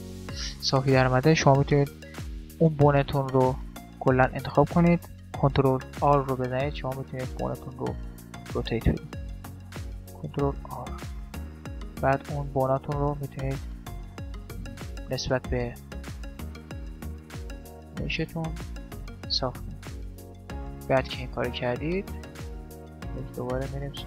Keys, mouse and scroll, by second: 1.8-5.5 right drag, 3.8 click, 6.1 ctrl+r, 8.3 right click, 9.9 ctrl+r, 12.1-13.7 right drag, 12.5 ctrl+r, 14.1-16.0 middle drag, 14.5-16.0 drag, 15.5 ctrl+r, 16.0 right click, 16.3 middle click, 17.1 right click, 17.4-18.7 drag, 18.1 ctrl+r, 19.1 middle click, 20.1-24.0 middle drag.